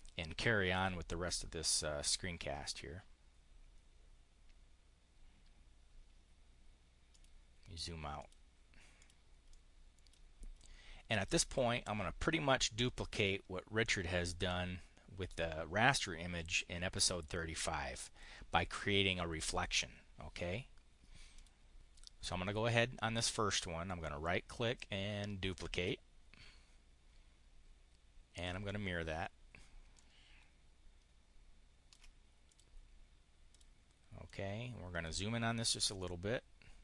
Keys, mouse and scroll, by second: 0.0 click, 6.9 click, 8.0 click, 8.8 click, 9.4 click, 10.4 click, 11.4 click, 13.0 click, 17.0-18.1 drag, 21.2 click, 21.8 click, 23.8 click, 25.4 click, 28.3 click, 29.8-31.9 ctrl+drag, 32.4 click, 33.4 click, 34.1 click, 35.8 click.